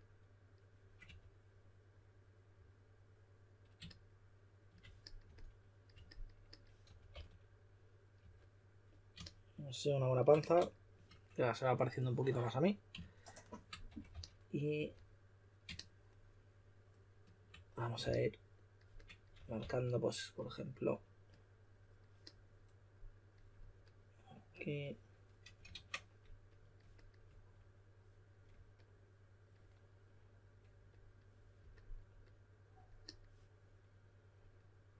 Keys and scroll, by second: 1.0 typing, 6.6-8.2 typing, 13.6-14.7 typing, 18.0 s, 19.1-20.3 typing, 25.7 super+z.